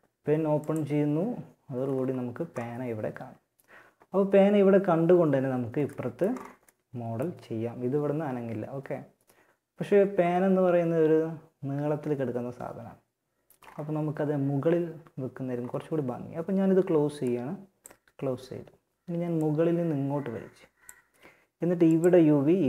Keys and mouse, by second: 4.4 middle click, 7.6-13.4 middle drag, 18.1 click, 18.5-20.3 drag, 22.4 click.